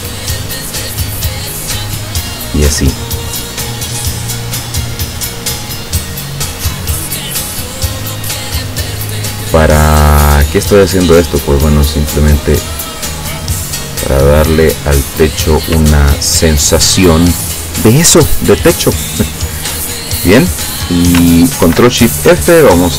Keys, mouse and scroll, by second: 0.0 shift+click, 1.6 shift+click, 3.1 shift+click, 4.4 shift+click, 5.8 shift+click, 7.1 shift+click, 8.2 shift+click, 11.7-15.3 drag, 16.0-16.6 ctrl+scroll down 4, 19.8 click, 21.7 ctrl+shift+f.